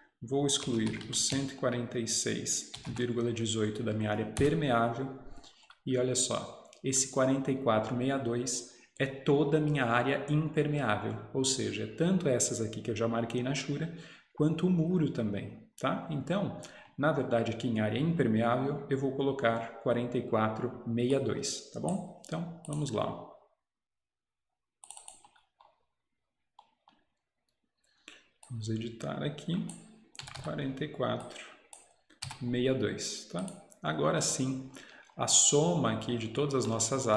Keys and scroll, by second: 0.5-3.0 typing, 4.4 Return, 30.3 4, 30.4 4, 32.3 2.